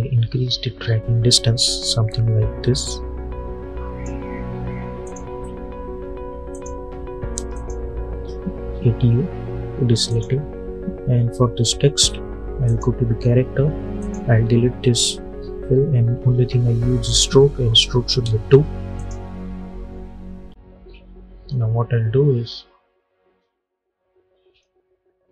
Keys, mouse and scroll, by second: 8.1 u, 10.0 click, 12.5 click, 16.9 click, 18.1 Return, 18.8 click, 21.4-25.3 drag.